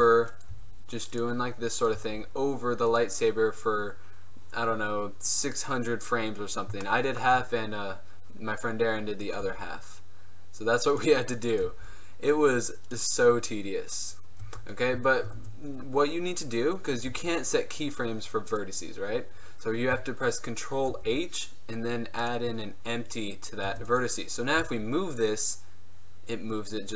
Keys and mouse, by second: 0.0 Tab, 0.6 g, 2.1 g, 6.4 middle click, 9.5 g, 11.8-13.0 drag, 11.8 g, 14.5 Tab, 14.8-15.3 middle drag, 15.5 Tab, 17.2 g, 19.5-20.8 drag, 21.0 ctrl+h, 23.8 Tab, 24.7 g.